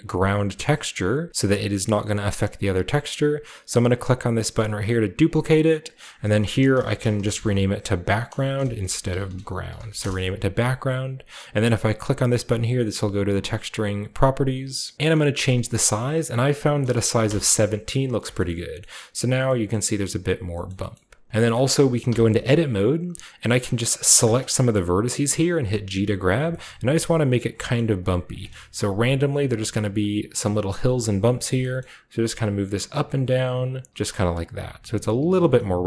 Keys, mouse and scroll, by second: 1.8 scroll down 2, 2.4 scroll up 2, 5.2 click, 6.0-7.3 drag, 6.8-10.5 typing, 13.2 click, 14.9 click, 15.7 click, 16.8 1, 17.2 7, 17.3 Return, 18.0 scroll down 1, 18.3-20.5 shift+middle drag, 20.7 middle click, 20.9 shift+middle click, 21.3-23.1 scroll up 1, 21.5-23.1 middle drag, 22.1 Tab, 24.2 click, 24.7 g, 24.9-26.1 right drag, 25.4-27.9 scroll down 1, 26.3 click, 26.4-29.4 typing, 27.4 click, 28.5-31.6 shift+scroll down 1, 29.9-32.1 middle drag, 32.5 click, 33.2 click, 33.6 click, 33.9-35.1 typing, 34.2 Tab, 34.5 scroll down 1, 34.6 click, 34.6 middle click, 35.2 click, 35.4 Tab, 35.6-35.8 middle drag.